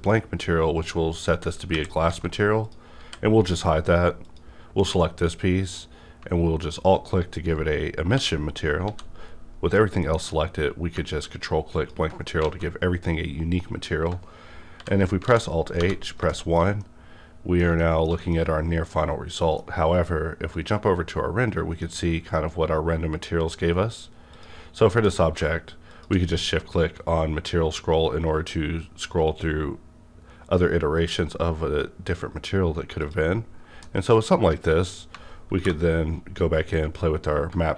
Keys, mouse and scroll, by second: 0.5-1.7 scroll down 2, 1.7 KP_5, 2.0 alt+a, 2.6 click, 3.0 h, 3.8 click, 4.7 alt+m, 6.6 alt+click, 8.1-8.8 typing, 10.0 alt+m, 11.8 ctrl+click, 12.4 alt+a, 12.5 ctrl+click, 14.8 alt+h, 15.3 alt+a, 15.7 1, 16.3 shift+middle click, 16.8-18.9 shift+middle drag, 18.9-24.3 shift+middle drag, 20.5 click, 24.0-24.3 scroll up 1, 24.3 click, 24.9 m, 25.3 click, 25.9 shift+click, 26.3-27.7 scroll up 2, 31.3-31.7 scroll up 2, 31.7 scroll down 2, 32.0-33.0 scroll up 2, 33.0 click, 33.8-36.8 middle drag, 35.5 alt+m, 36.8 click.